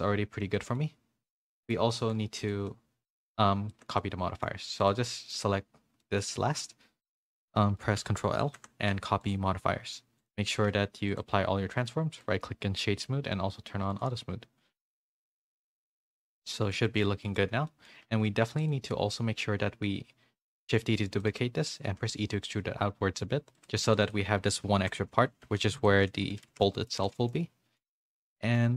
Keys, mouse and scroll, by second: 0.5 middle click, 1.5 middle click, 2.7 middle click, 3.7 shift+middle click, 4.0 middle click, 4.8 shift+click, 5.1 shift+middle click, 6.0-8.4 shift+middle drag, 8.4 ctrl+l, 10.5 ctrl+a, 15.4 a, 15.5 a, 15.7 middle click, 16.8 middle click, 17.3 click, 17.4 Tab, 17.6 middle click, 18.5 Tab, 18.5 3, 18.9 middle click, 20.4 shift+d, 21.2 middle click, 21.8 e, 24.8 3, 24.8 l, 25.8-28.3 typing, 26.0 Tab, 26.6 middle click, 27.3 middle click, 28.3 middle click.